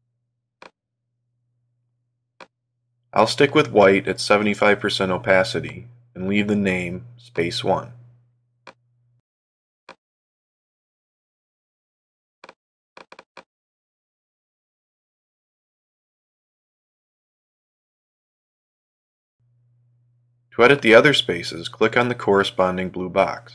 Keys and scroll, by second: 14.3 shift+s, 16.1 Return.